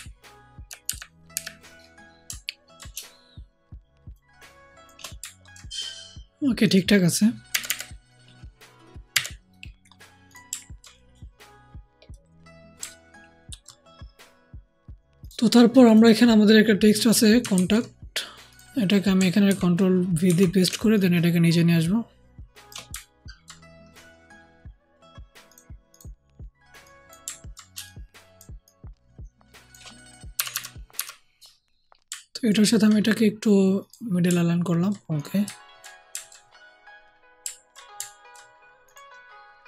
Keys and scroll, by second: 0.8 Up, 1.2 Up, 7.4 Left, 7.6 Left, 9.0 Left, 19.4 ctrl+v, 20.6 ctrl+shift+t, 22.8 ctrl+alt+shift+t, 30.3 alt+shift+Down, 30.9 alt+shift+Down.